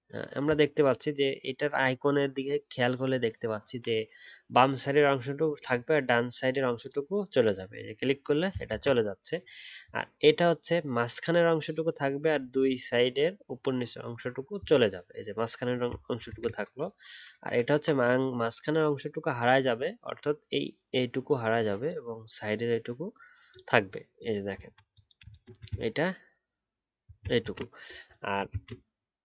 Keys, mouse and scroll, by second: 8.7 ctrl+z, 16.2 ctrl+z, 24.6-25.7 alt+scroll down 1, 25.7-26.8 alt+scroll up 2, 27.4 ctrl+z, 28.5 ctrl+z.